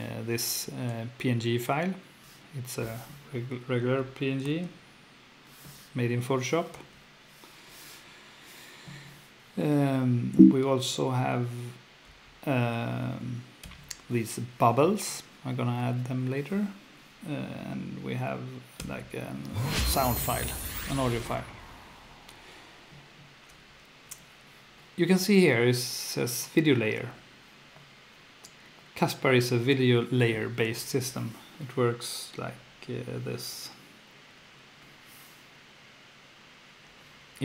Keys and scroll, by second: 4.5 space, 6.8 space, 10.3 F1, 12.1 F1, 13.6 F2, 18.8 F2, 23.7 F1.